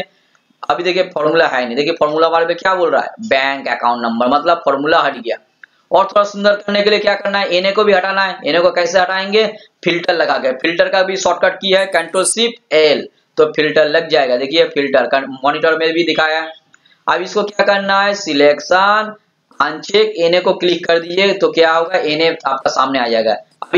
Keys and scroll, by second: 12.6 ctrl+shift+l.